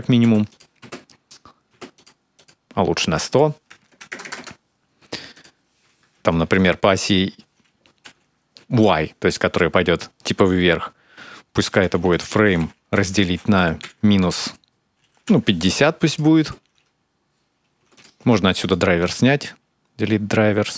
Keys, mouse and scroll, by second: 0.6 space, 1.5 space, 1.8 click, 4.0 KP_0, 5.1 click, 16.2 space, 17.6 space, 17.8 click, 18.8 right click.